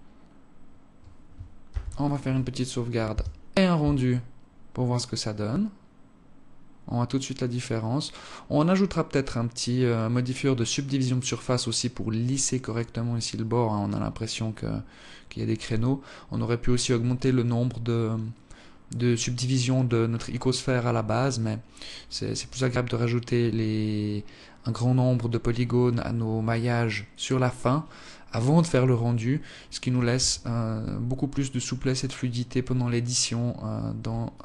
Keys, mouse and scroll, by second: 0.5 scroll down 3, 1.3 ctrl+s, 29.9 Escape, 30.9-31.4 scroll down 1, 31.6 scroll down 1, 34.1 alt+click.